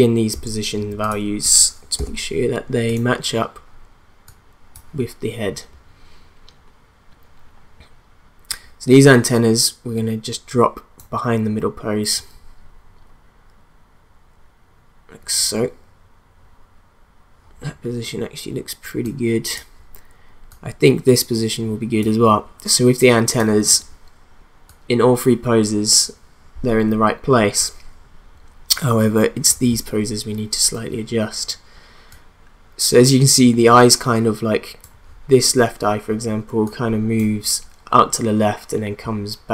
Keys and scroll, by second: 2.0 p.